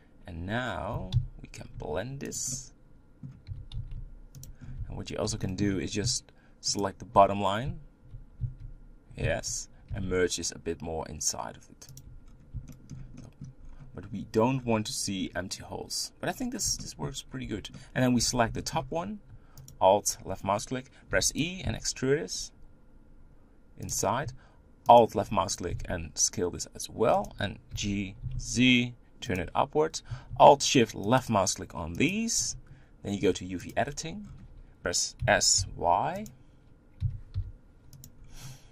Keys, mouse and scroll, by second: 0.9 g, 2.5-3.5 middle drag, 3.5 g, 4.6 scroll up 2, 4.8 Tab, 5.4 shift+middle click, 5.8-6.6 scroll up 2, 6.8 alt+click, 8.1 z, 8.6 z, 9.4 z, 9.9 s, 12.3-12.7 scroll down 3, 12.7 shift+middle click, 13.6-14.6 scroll up 3, 14.6-16.4 scroll down 3, 16.4-16.8 scroll down 2, 16.8 shift+middle click, 17.4 Tab, 17.7 middle click, 18.1 Tab, 18.6 shift+middle click, 18.9-19.7 scroll up 2, 19.7 alt+click, 21.1 e, 21.7 s, 25.0 alt+click, 25.7 s, 27.7 g, 31.2 alt+shift+click, 32.1 alt+shift+click, 33.7-35.2 drag, 35.2 s, 37.0 s.